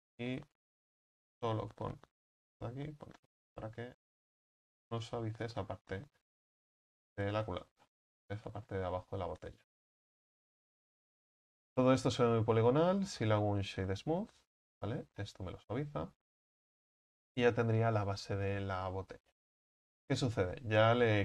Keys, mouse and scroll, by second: 0.9 right click, 1.4 alt+shift+right click, 2.5 ctrl+b, 5.3 Tab, 5.6-6.0 scroll down 5, 6.0-8.8 middle drag, 8.8-9.4 scroll down 1, 9.4-14.6 middle drag, 14.6 click, 15.2-20.3 middle drag, 20.3-21.2 drag.